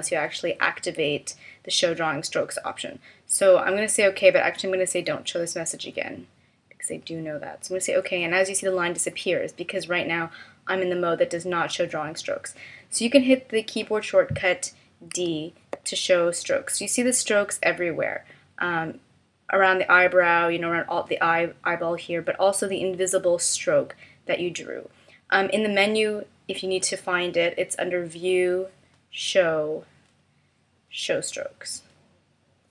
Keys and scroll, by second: 15.2 d.